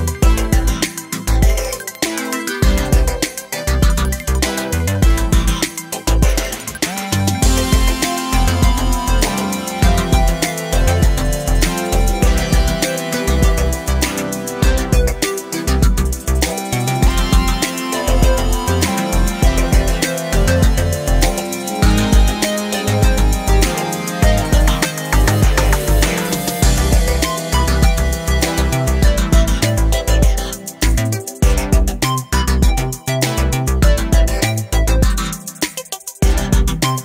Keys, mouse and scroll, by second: 0.1 g, 1.4-1.8 scroll down 7, 1.8 middle click, 2.2-2.7 scroll up 2, 2.7 middle click, 3.0 a, 3.1 a, 3.5 e, 5.7 a, 5.8 a, 6.0 middle click, 6.7 s, 7.8 middle click, 8.7 scroll up 1, 9.0-10.5 shift+middle drag, 10.5 s, 13.2 scroll down 3, 13.2 middle click, 13.7-14.6 scroll up 1, 14.6 KP_7, 15.1 shift+middle click, 15.8 s, 17.6 alt+z, 18.0 click, 19.2-20.9 shift+drag, 21.8 click, 22.2 alt+z, 22.3 scroll down 1, 22.5 middle click, 22.9-23.2 scroll up 2, 23.2-24.7 middle drag, 24.7 scroll up 4, 25.0-26.2 shift+middle drag, 26.2 scroll down 2, 26.4 shift+middle click, 27.0 r, 27.3 click, 27.9 3, 28.8 i, 32.1 middle click, 32.8-33.8 scroll up 2, 33.8-35.0 middle drag, 35.0 ctrl+z, 35.2 middle click, 36.0 shift+click, 36.2 middle click, 36.9 shift+click.